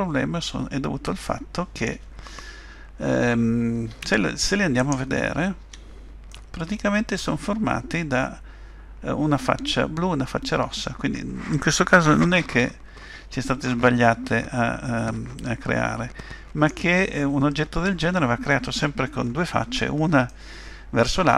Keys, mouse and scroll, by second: 0.5-1.1 scroll up 1, 1.3 shift+middle click, 3.9 Tab, 4.8 click, 5.6 Tab, 6.3 middle click, 20.3 middle click.